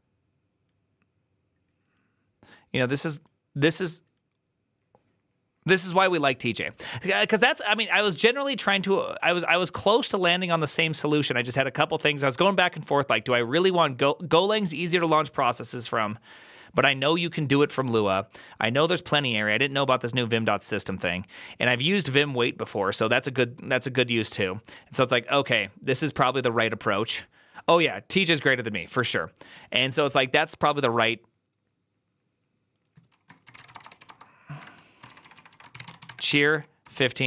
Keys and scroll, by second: 33.4-37.2 typing.